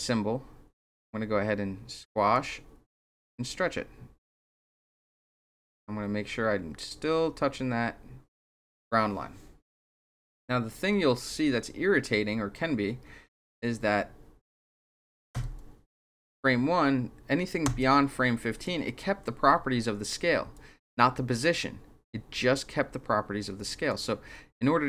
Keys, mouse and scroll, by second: 2.3-3.4 drag, 4.2 click, 5.5-8.5 drag, 10.8-14.7 drag, 17.6 Return, 18.4 Return, 20.5-23.9 drag.